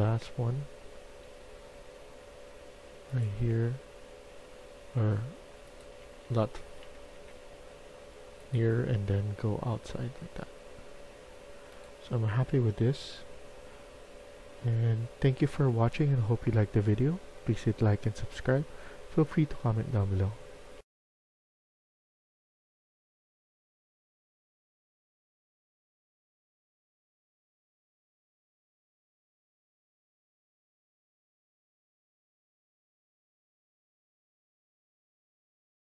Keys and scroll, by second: 0.8 w, 4.2 w, 6.0 s, 6.2 s, 7.0 s.